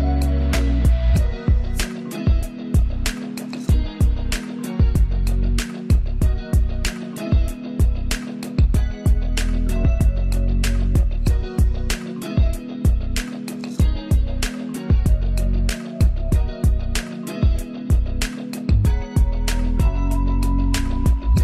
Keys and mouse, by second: 0.9 ctrl+space, 1.0 ctrl+alt+click, 4.7 ctrl+space, 5.0 ctrl+alt+click, 9.6 ctrl+z, 9.9 click, 10.9 ctrl+z, 13.9 click, 17.5-19.5 drag, 19.5 ctrl+space, 19.8 ctrl+click, 20.0 ctrl+space, 20.9 Return.